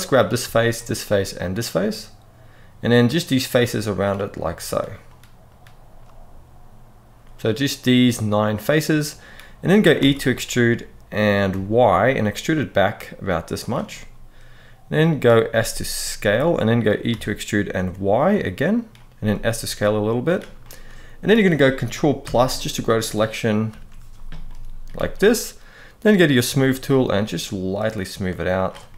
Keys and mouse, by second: 1.0 shift+click, 2.5 shift+click, 5.2 shift+click, 7.1-8.8 middle drag, 9.7 e, 11.2 y, 13.3 click, 13.6-14.7 middle drag, 15.2 s, 16.3 click, 16.9 e, 17.5 y, 18.5 click, 18.9 s, 20.0 click, 20.3 middle click, 22.0 ctrl+KP_Add, 23.4 ctrl+KP_Add, 24.1 middle click, 25.8 click, 26.8 click, 28.6-28.9 middle drag.